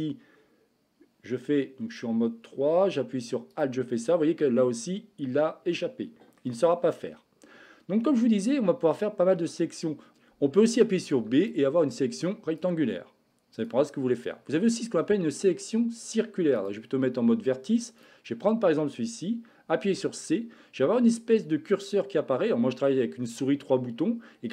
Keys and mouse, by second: 5.7 middle click, 8.2 middle click, 10.1 b, 11.1 b, 16.6 click, 17.9 click, 19.8 c.